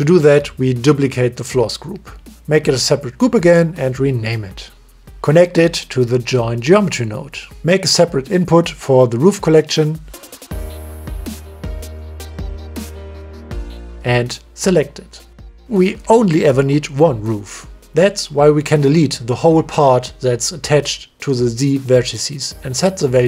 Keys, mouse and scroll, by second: 0.7 ctrl+shift+d, 2.8-3.8 drag, 3.8 shift+right click, 4.3 click, 6.2 click, 8.2 ctrl+right click, 9.4 click, 10.5 click, 10.8 click, 11.5 shift+right click, 11.6 click, 14.3 click, 18.5 click, 22.1 click, 22.8 Delete.